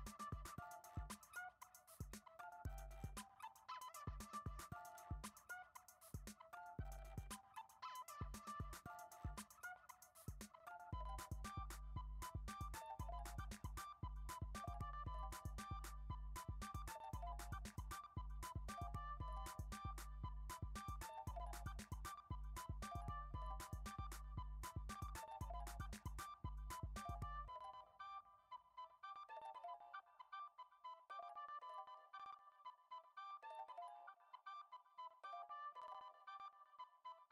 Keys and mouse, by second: 0.0-3.1 typing, 3.6 middle click, 4.7 g, 5.8 ctrl+Tab, 6.3 right click, 8.5 click, 9.3-10.3 drag, 10.6 click, 11.6 click, 12.2 middle click, 12.6 shift+middle click, 13.8-14.2 shift+middle drag, 14.7 shift+right click, 15.0 shift+a, 17.7 middle drag, 18.2 s, 20.3 shift+middle click, 20.8 Tab, 21.4 f, 21.6 e, 22.6 e, 24.1 g, 25.5 s, 27.3 e, 29.5 ctrl+Tab, 30.1-30.6 right drag, 32.1 click, 33.0 click, 34.2 Tab, 34.8 ctrl+r, 36.3 click, 36.6 alt+z, 37.0 click.